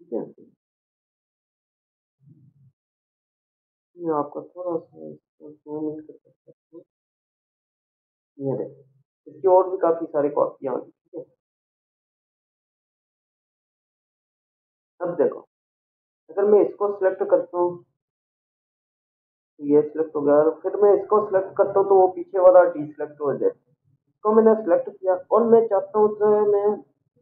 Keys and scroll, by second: 8.3 ctrl+=, 12.0 ctrl+-, 15.5 ctrl+0.